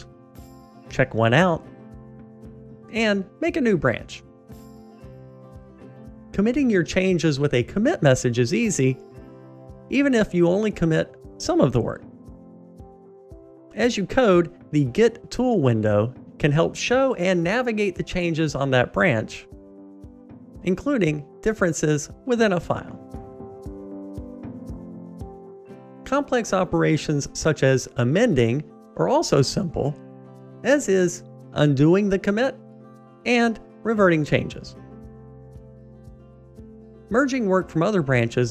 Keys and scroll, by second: 5.9 super+k, 9.8 super+a, 14.0 Delete, 18.1 super+k, 25.9 ctrl+alt+m, 34.3 super+1.